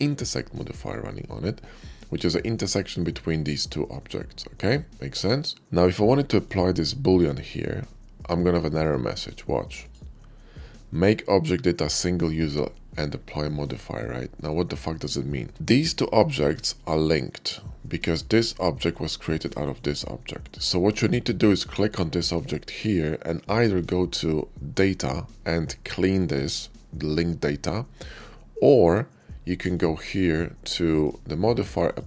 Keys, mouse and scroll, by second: 1.4-2.4 middle drag, 4.5-5.2 middle drag, 6.2 click, 8.5 click, 9.5 click, 15.6 shift+click, 16.2 shift+click, 18.1 click, 19.6 click, 21.6 click, 23.9 click, 28.4 click, 29.6 click, 30.7 click, 31.6 click.